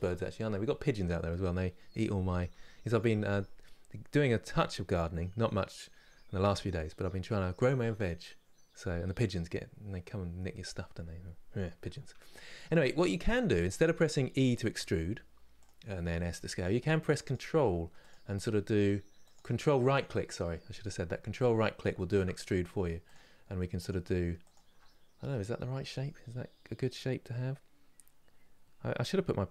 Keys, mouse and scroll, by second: 16.9-21.2 ctrl+right drag, 21.2-22.7 shift+middle drag, 22.7-24.9 ctrl+right drag, 24.9-26.7 scroll down 2.